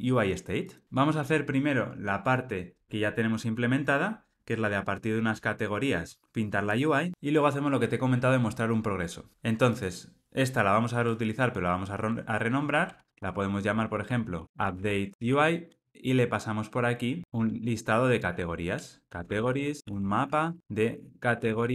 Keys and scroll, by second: 13.8 alt+shift+Left.